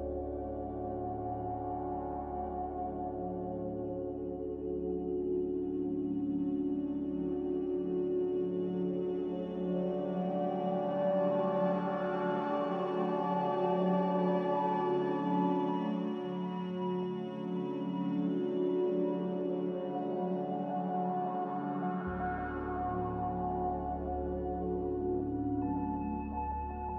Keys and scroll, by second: 4.1 z, 13.0-13.9 typing, 16.5-17.3 typing, 19.8 ctrl+z, 24.8 ctrl+z.